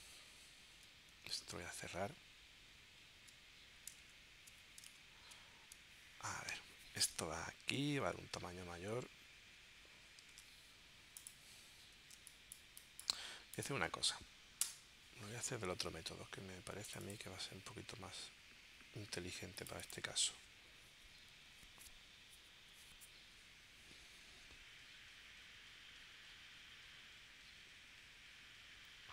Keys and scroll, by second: 1.3 super+q, 5.0 super+Tab, 10.3 super+Tab, 12.2 space, 14.6 BackSpace.